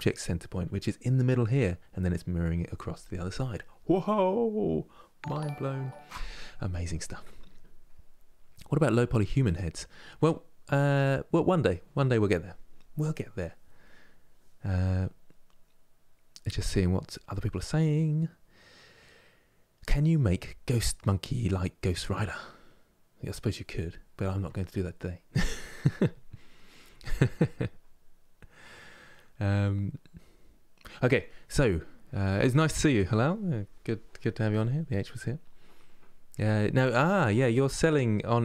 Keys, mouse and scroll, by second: 10.0-10.4 scroll down 2, 10.9-13.7 scroll up 2, 34.8-37.8 middle drag.